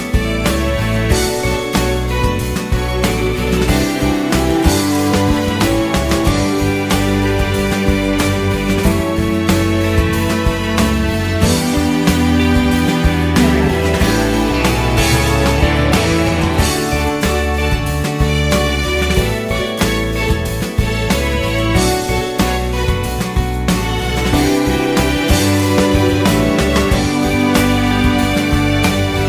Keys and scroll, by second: 12.7 q, 12.9 ctrl+a, 17.9 ctrl+a, 18.8 ctrl+a, 19.9-21.2 typing, 21.7 Return, 23.7 shift+o, 28.5 ctrl+shift+s.